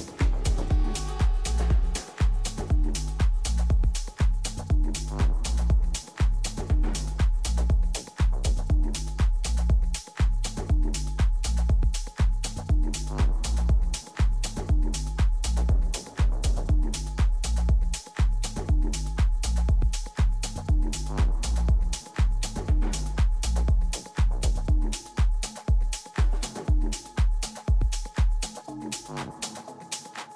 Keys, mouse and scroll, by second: 0.0 a, 0.7 b, 1.8-3.7 drag, 3.8 a, 4.0 a, 4.7 a, 5.3 b, 6.7 g, 9.2 a, 9.8 b, 11.4 g, 13.8 a, 14.2-18.3 middle drag, 22.6-25.0 middle drag, 23.8 a, 24.1 a, 25.0-28.9 right drag, 27.5 f, 27.9 a, 28.9 middle click, 29.8-30.3 drag, 29.8 z.